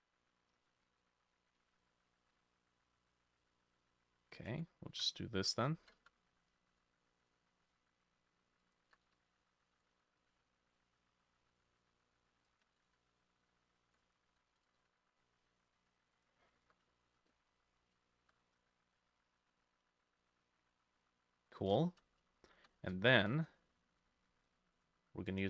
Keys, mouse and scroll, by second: 2.2-4.9 ctrl+middle drag, 4.1-8.8 ctrl+drag, 5.0 e, 5.4 Escape, 5.8 s, 6.1 z, 6.8 y, 8.9-16.5 drag, 8.9-10.4 typing, 9.5 ctrl+middle click, 10.8-12.1 ctrl+middle drag, 12.9 e, 14.3 s, 14.8 y, 16.5 scroll down 1, 16.7 Tab, 17.4 shift+middle click, 18.4 middle click, 18.4 scroll up 2, 18.7 shift+middle click, 20.7 middle click, 21.8-22.9 shift+middle drag, 22.1 scroll down 2, 23.0 shift+middle click, 23.2-23.5 shift+scroll down 1.